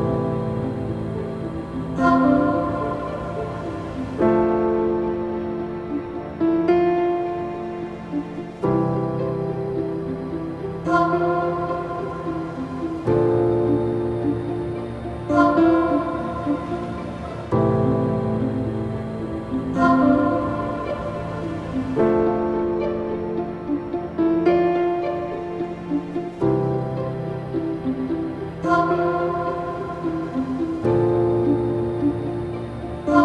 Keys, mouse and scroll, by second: 0.4 click, 0.9-1.6 scroll up 1, 1.6-2.8 drag, 12.2 click, 13.9 ctrl+z, 14.3 scroll down 1, 14.4 middle click, 14.6-14.9 scroll up 4, 14.9 middle click, 15.0 scroll down 1, 15.2 scroll up 2, 15.5 shift+middle drag, 15.8-16.5 scroll down 3, 16.5 click, 16.8-17.9 scroll up 4, 17.9-19.2 middle drag, 19.2 scroll up 1, 19.5-21.0 shift+middle drag, 21.0 shift+a, 24.0 ctrl+alt+KP_0, 25.6 n, 26.6 click, 27.0 click, 27.6 drag, 28.1 scroll down 1, 29.1 scroll down 1, 29.5-31.3 shift+middle drag, 31.3 click, 32.4-33.2 drag.